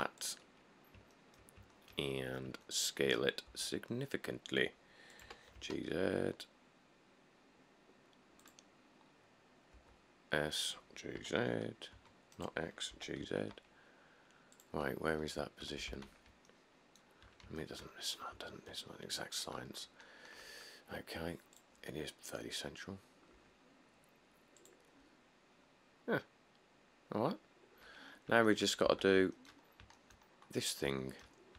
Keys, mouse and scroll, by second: 0.0 g, 1.0 middle click, 1.2 middle click, 2.2 middle click, 2.3-2.6 scroll, 3.7 s, 5.5 g, 5.8 z, 9.0 scroll, 10.0 s, 11.4-13.4 typing, 13.9 scroll, 15.1-15.6 scroll, 15.8 typing, 18.1 middle click, 18.4 middle click, 18.5 middle click, 19.9 middle click, 20.2 middle click, 20.3 middle click, 20.5 middle click, 20.6 middle click, 22.4-22.8 scroll, 25.8 middle click, 25.9 middle click, 27.1 middle click, 27.4 middle click, 27.5 middle click, 28.0-28.6 scroll, 29.1 1, 29.9-30.3 middle click, 30.5 middle click, 30.7 middle click, 30.8 middle click, 30.8 middle click.